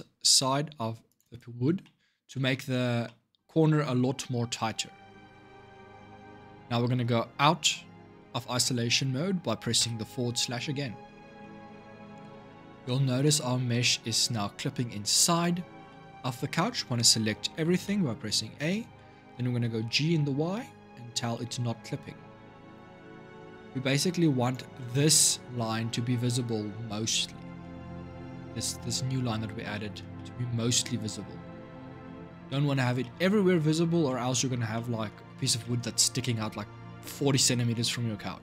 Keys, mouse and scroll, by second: 0.4 ctrl+r, 1.5 scroll down 1, 1.6 middle click, 2.5-2.8 scroll up 3, 2.8-5.1 middle drag, 5.1-5.5 scroll down 5, 5.5-8.5 shift+middle drag, 9.6 KP_Divide, 11.2-12.6 shift+middle drag, 12.6-13.0 scroll up 2, 13.0-17.6 middle drag, 17.6 a, 19.3 g, 24.5-31.8 middle drag, 31.8-32.3 scroll down 2, 32.3-33.6 shift+middle drag, 33.6 scroll up 3, 33.8-37.6 middle drag, 37.6-38.2 scroll down 3, 38.2-38.4 middle drag.